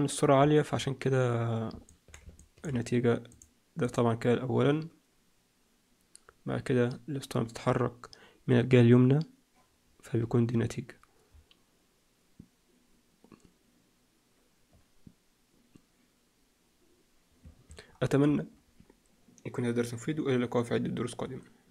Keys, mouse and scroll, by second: 1.8 middle click, 2.3 shift+middle click, 3.2 click, 3.7 click, 4.2-5.3 scroll up 2, 5.3-6.7 scroll up 1, 10.3-11.2 scroll down 2, 11.2-13.4 scroll down 1, 17.3 Escape.